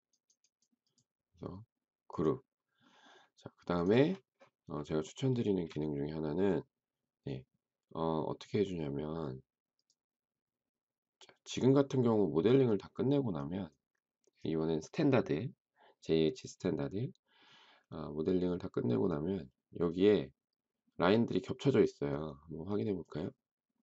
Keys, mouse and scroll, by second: 5.4 shift+middle click.